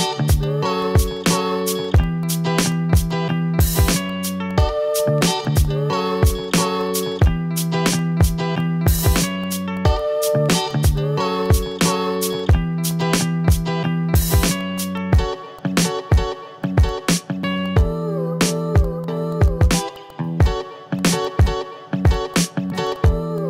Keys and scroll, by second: 0.4 v, 0.8 ctrl+z, 1.7 ctrl+z, 5.3 ctrl+z, 5.8 ctrl+z, 9.1 ctrl+z, 12.2 v, 12.6 ctrl+z, 16.8 ctrl+z, 18.8 v, 19.2 u, 19.7 v, 21.4 ctrl+z, 21.8 ctrl+z, 22.8 ctrl+z.